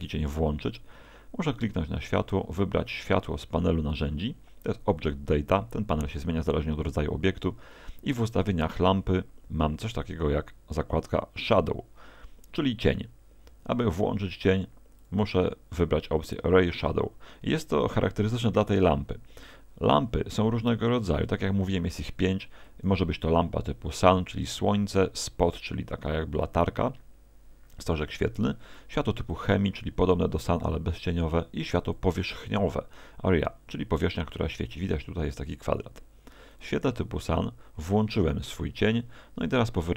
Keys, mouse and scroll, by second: 0.0 right click, 5.0 click, 15.0 click, 22.7 click, 24.9 click, 29.3 click, 31.9 click, 36.6 click.